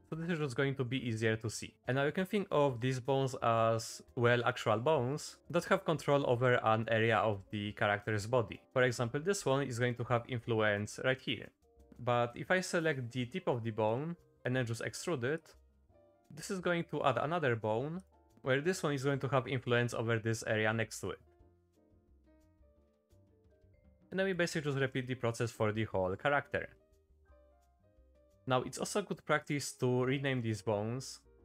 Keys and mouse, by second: 0.0 click, 0.4 shift+middle click, 1.6 middle click, 12.2 middle click, 12.6 shift+middle click, 14.0 shift+click, 14.4 e, 16.1 click, 18.0 click, 21.7 e, 23.0-24.4 drag, 25.0 shift+middle click, 25.6 e, 27.0 click, 28.1 shift+middle click.